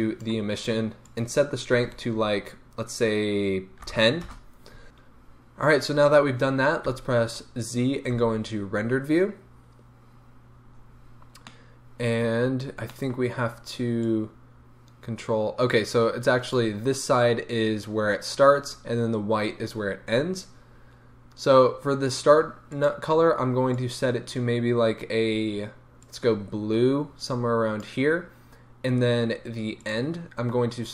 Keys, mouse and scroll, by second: 4.4 Return, 6.9 z, 11.2 scroll down 2, 11.5-14.2 middle drag, 12.5-12.9 scroll up 1, 14.2-22.9 drag, 29.8-30.3 drag, 30.8 click.